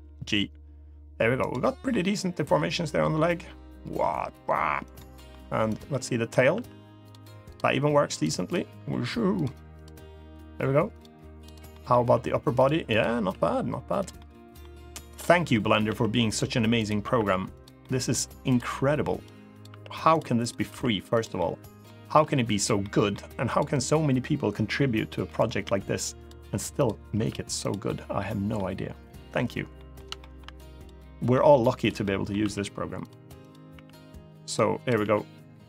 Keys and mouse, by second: 1.1 right click, 1.3 middle drag, 1.7 g, 4.6 right click, 4.9 middle click, 5.4 drag, 5.6-6.0 middle drag, 6.3 r, 6.8 drag, 7.4 r, 7.8 click, 8.2 click, 9.1 click, 9.1 r, 9.5 click, 9.8 r, 10.6 click, 11.2 click, 11.4 middle click, 11.7 r, 12.3 click, 12.6 click, 12.9 r, 13.7 click, 13.9 middle click, 14.8 click, 15.3 middle click, 15.6 r, 16.0 click, 16.6 click, 17.3 click, 17.3 r, 17.5 middle drag, 18.5 r, 18.9 click, 19.2 click, 19.4 r, 19.8 click, 20.1 click, 20.4 r, 20.9 click, 21.1-21.6 middle drag, 21.8 r, 22.3 click, 22.5 middle click, 23.2 click, 25.0 middle click, 25.4 r, 25.9 click, 26.9 r, 27.3 click, 27.6-28.3 middle drag, 29.5 middle click, 29.9 shift+middle drag, 30.5 click, 31.1 middle click, 31.8 middle click, 32.1 r, 32.7 click, 33.2 click, 33.5 r, 34.2 right click, 34.6 click, 34.7 r.